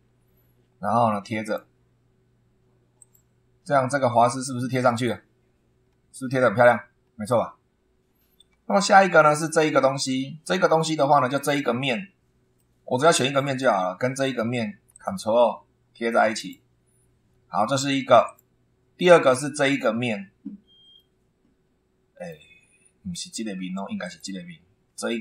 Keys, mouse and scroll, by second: 1.4 click, 3.0 click, 3.5-3.9 scroll up 1, 5.9-6.2 scroll down 1, 7.3-7.6 scroll down 2, 7.6 scroll up 2, 8.7 shift+middle click, 9.7-10.0 scroll up 2, 11.3 click, 12.0 scroll down 1, 12.6-13.8 middle drag, 14.9 ctrl+click, 16.4 click, 18.2 click, 19.6 click, 21.0-22.5 middle drag, 22.6-23.0 scroll up 2, 24.0 click.